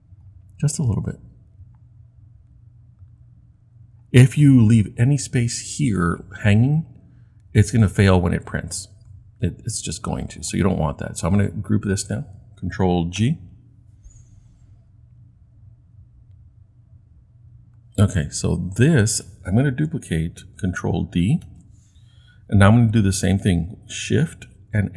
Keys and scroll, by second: 13.2 super+g, 21.4 super+d, 24.7 shift+Left.